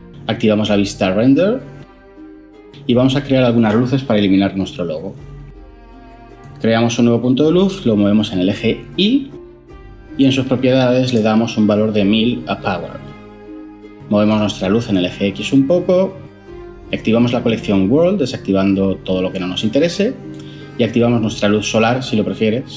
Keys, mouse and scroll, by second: 4.9 shift+a, 12.0 typing, 13.2 Return.